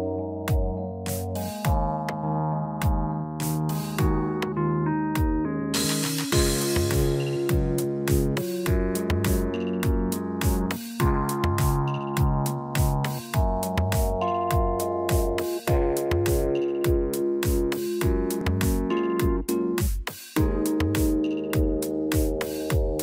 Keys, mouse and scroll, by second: 0.3 click, 1.1 middle click, 3.3 shift+middle click, 3.4 shift+middle click, 3.6-4.0 scroll up 3, 4.0 middle click, 4.3 Tab, 4.8 click, 7.7 shift+click, 7.8 shift+click, 8.8 ctrl+b, 16.7 Tab, 17.4 middle click, 18.7 middle click, 19.5 shift+middle click, 22.1 click.